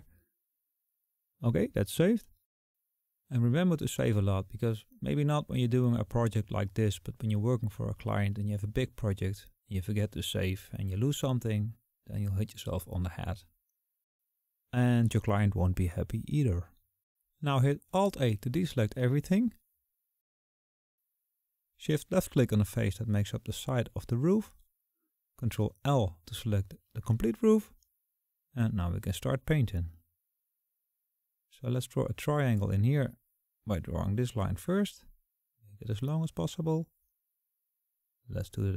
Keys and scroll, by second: 19.4 alt+a, 25.9 ctrl+shift+l.